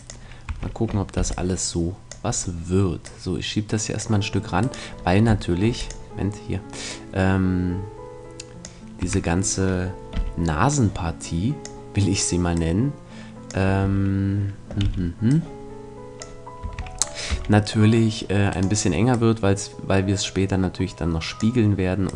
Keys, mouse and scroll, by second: 0.2-2.4 drag, 0.4 a, 1.2 b, 2.4-4.4 middle drag, 3.0-4.7 drag, 4.6 right click, 5.0 right click, 6.4-8.7 drag, 9.0 a, 10.1 b, 12.5-14.4 drag, 13.8 a, 14.8 b, 17.3 c, 19.1-21.0 drag, 22.0-22.1 drag.